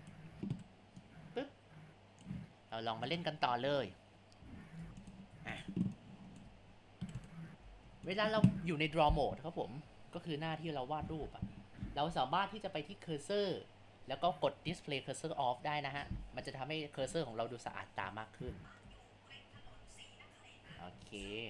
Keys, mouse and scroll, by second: 0.6 Delete, 1.2-3.3 drag, 4.8 Tab, 5.3 Tab, 6.0 click, 7.0 Delete, 7.8 Tab, 9.4-11.1 drag, 13.1-16.2 drag, 17.1-18.9 drag, 18.9 ctrl+z, 20.4 click.